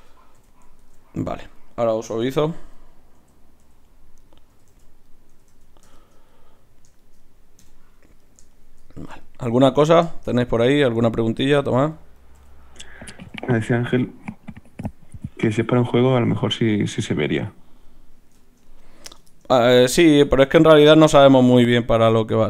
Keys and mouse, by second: 0.4 f, 0.8 ctrl+Tab, 1.2-2.4 drag, 2.2-5.5 typing, 7.6 KP_Divide, 12.4 f, 13.3 f, 15.1 f, 15.5 f, 21.9 Tab.